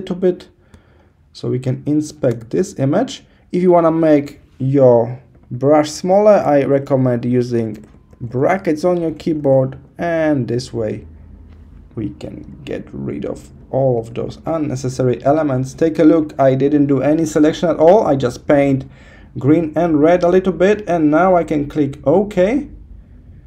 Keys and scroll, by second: 1.3 -, 4.9 [, 6.3 ], 8.0 [, 12.6 super+0, 13.7 super+-.